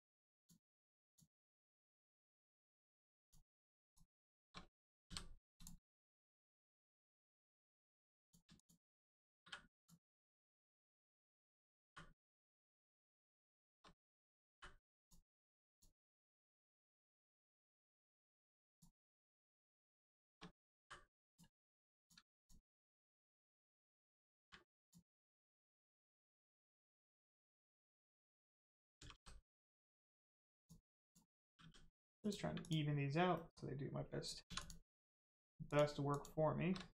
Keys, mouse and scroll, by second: 0.3 shift+click, 1.0 shift+click, 1.6 middle click, 3.1 click, 3.9 shift+click, 5.0 click, 5.5 click, 5.8 middle click, 6.2 scroll up 1, 6.8 middle click, 8.1 click, 8.5 shift+click, 9.4 m, 9.7 click, 11.0 shift+click, 11.8 m, 12.1 click, 13.4 shift+click, 14.4 m, 14.9 click, 16.0 middle click, 16.7 shift+middle click, 17.3 middle click, 17.4 middle click, 17.7 shift+middle click, 18.7 click, 19.8 shift+click, 20.7 m, 21.2 click, 22.3 shift+click, 24.3 m, 24.7 click, 25.2-25.5 scroll down 1, 25.6 middle click, 27.8 click, 28.9 g, 30.5 click, 31.4 g, 32.2 click, 33.3 middle click, 34.4 2, 34.5 click, 35.6 shift+click, 36.1 shift+click.